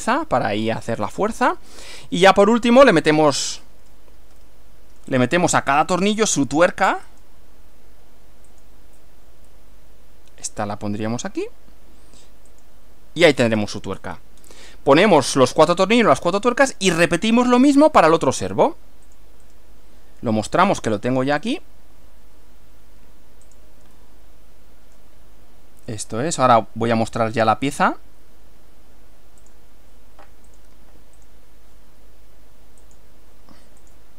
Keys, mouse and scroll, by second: 0.6 scroll down 1, 1.1-4.2 middle drag, 4.4 shift+middle click, 5.2 shift+scroll up 1, 6.2 click, 7.2 click, 8.5 click, 9.6-10.6 middle drag, 12.5 click, 13.4 scroll down 2, 13.6 scroll up 2, 13.7-14.6 scroll down 6, 15.6-16.6 middle drag, 19.1 click, 19.5 right click, 21.4 click, 23.5 click, 24.0-25.2 middle drag, 26.0 click, 26.6 right click, 29.6 click, 30.5 click, 31.2 click, 32.9 click, 33.8 click.